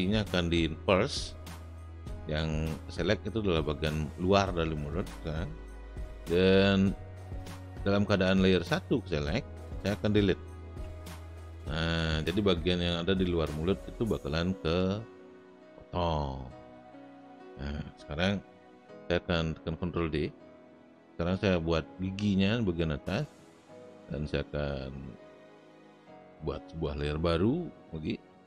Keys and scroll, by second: 10.8 Delete, 19.9 ctrl+d.